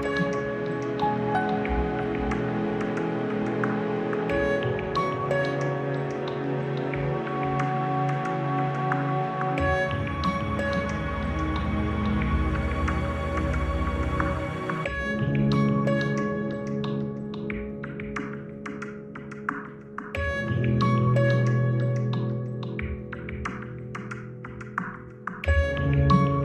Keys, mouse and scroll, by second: 3.1-3.9 scroll down 5, 4.1 scroll up 1, 5.0 a, 6.2-6.7 scroll down 4, 9.1 Delete, 10.9 Return, 13.2 click, 14.5 click, 15.8 scroll up 2, 17.0-17.5 scroll up 2, 20.1 m, 21.9 click, 24.7 click.